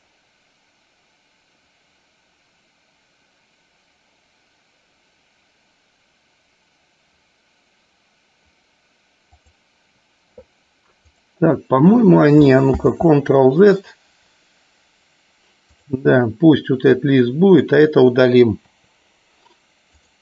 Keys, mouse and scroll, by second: 12.8 ctrl+z, 15.8 click, 17.1 click, 18.7 Delete, 20.0 click.